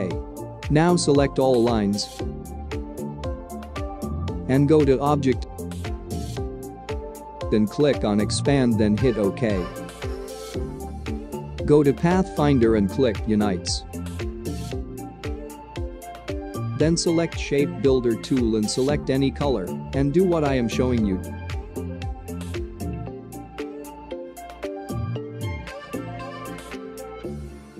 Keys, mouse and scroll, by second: 1.5-5.4 drag, 7.8 click, 14.4 click, 18.3 click, 21.0 click, 22.1-23.6 alt+scroll up 2, 23.6 click.